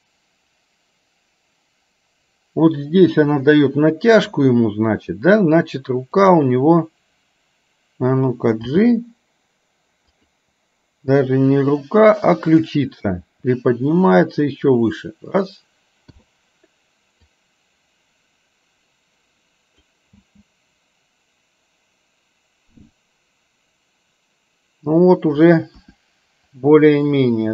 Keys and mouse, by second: 6.3 click, 8.6 g, 12.6 click, 13.4 r, 16.3 i, 17.5-20.0 drag, 20.3 space, 25.9 KP_1.